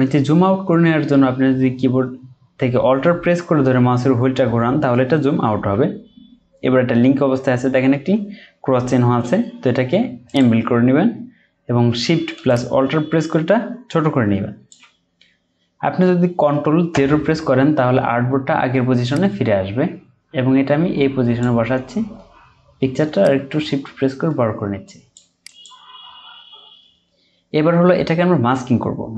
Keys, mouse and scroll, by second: 0.1-0.7 ctrl+scroll down 1, 5.3-8.4 ctrl+scroll down 1, 16.9 ctrl+0, 27.3-27.9 scroll up 1.